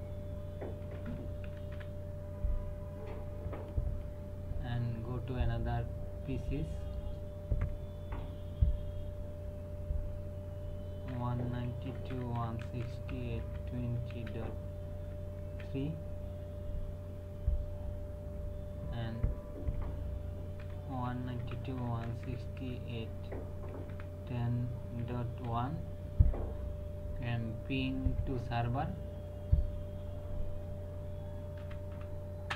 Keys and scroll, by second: 0.9 KP_1, 1.0 KP_0, 1.5 KP_Decimal, 1.7 KP_1, 11.1-14.1 typing, 15.4 KP_3, 20.6-22.6 typing, 23.7 KP_1, 23.9 KP_0, 24.9 KP_Decimal, 25.4 KP_1, 31.3-32.5 typing.